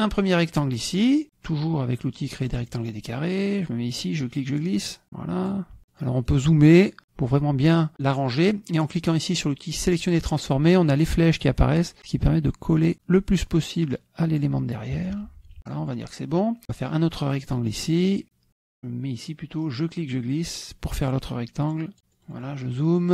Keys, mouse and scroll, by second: 2.5 click, 4.0-5.7 drag, 6.0 middle click, 10.0 click, 12.0 click, 13.4 click, 15.0 KP_Subtract, 15.6-16.2 middle drag, 16.7 click, 17.2 middle click, 17.5 click, 19.7-22.0 drag, 22.1 middle click.